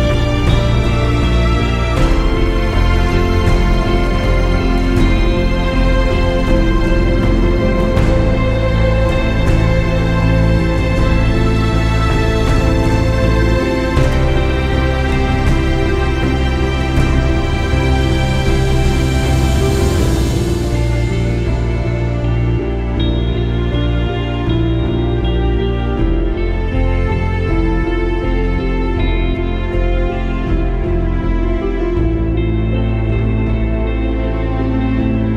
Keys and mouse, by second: 0.4 click, 2.9 click, 6.1 alt+shift+click, 11.1 click, 11.8 click, 14.6 click, 16.1 click, 16.9 click, 18.3 click, 18.4 click, 19.1 click, 20.5 click, 21.8 click, 22.7 click, 24.3 click, 26.1 click, 27.5 click, 28.3 click, 29.4 click, 30.4 click, 31.0 click, 31.4 click, 32.8 click, 34.0 click.